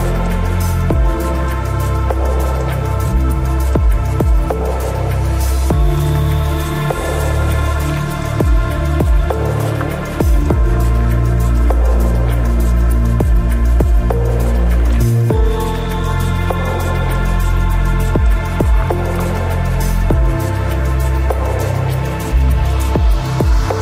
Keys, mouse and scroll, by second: 3.1-5.0 middle drag, 5.0-7.0 right drag, 8.3 ctrl+Tab, 14.2-16.0 right drag, 14.7 v, 15.4 c, 16.9 right click, 17.1 ctrl+e, 18.2 ctrl+r, 19.6 c, 21.4-23.1 drag, 23.3 click.